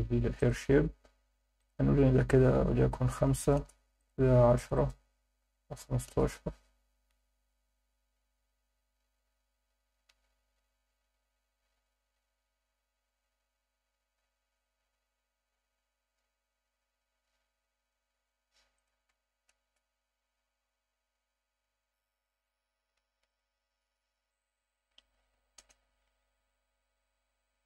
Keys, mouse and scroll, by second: 0.4 click, 0.7-1.6 scroll down 2, 1.6-3.6 drag, 4.0 click, 4.7-6.1 drag, 8.5 scroll up 3, 11.5 scroll up 2, 13.0 scroll up 3, 14.7-15.6 scroll down 6, 18.1 scroll up 1, 18.8 click, 23.3 click, 24.4-25.7 drag.